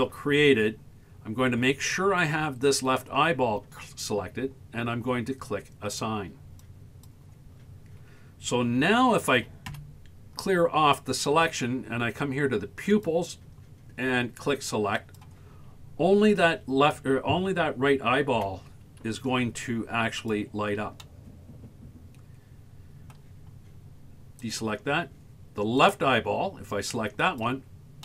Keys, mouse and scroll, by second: 6.6 click, 8.8 a, 9.4 a, 9.7 a, 12.9 click, 15.0 click, 16.5 Tab, 17.0 Tab, 18.4 z, 21.0-23.2 middle drag, 24.4 click, 25.8 click, 27.3 click.